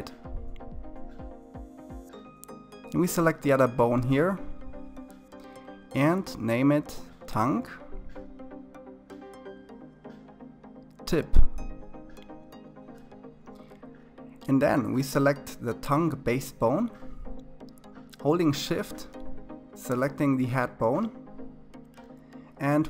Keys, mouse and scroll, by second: 1.9 click, 3.0 click, 4.5-6.8 drag, 6.8 BackSpace, 7.2 BackSpace, 8.0 BackSpace, 16.2 click, 19.1 shift+click, 21.6 ctrl+p.